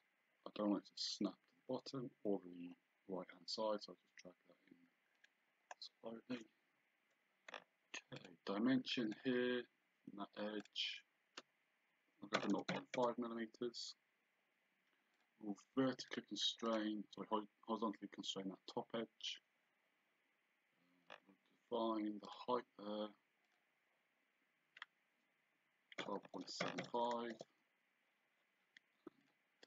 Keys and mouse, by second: 5.2 click, 7.5 d, 8.2 click, 10.6 click, 12.4 KP_0, 13.0 Return, 15.2 click, 19.2 Escape, 22.3 click, 23.5 click, 26.0 KP_1, 29.2 click.